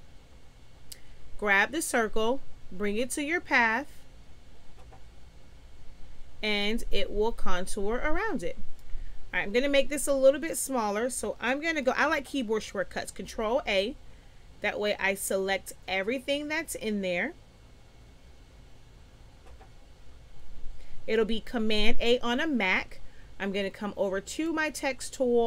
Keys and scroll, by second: 13.4 ctrl+a.